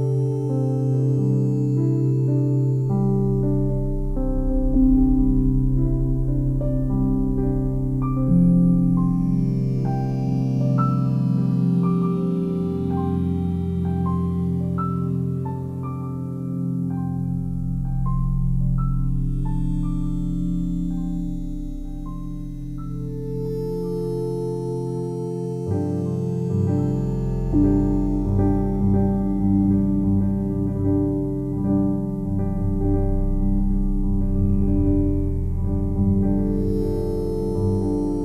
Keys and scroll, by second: 9.8 c.